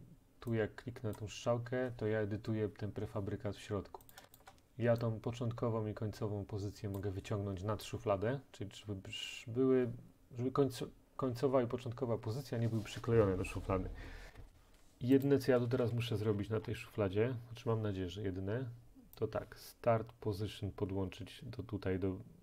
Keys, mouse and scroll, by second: 1.2 click, 4.1 click, 4.4 shift+click, 7.0 click, 9.8-12.0 drag, 9.8-12.0 right drag, 15.3 click, 16.0-17.3 scroll, 17.3-20.3 scroll.